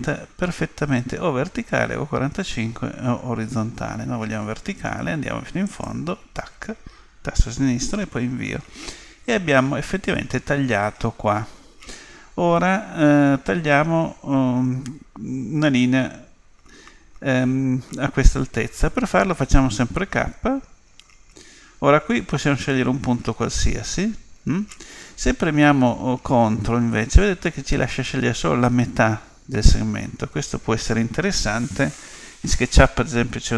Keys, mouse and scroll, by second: 19.4 k.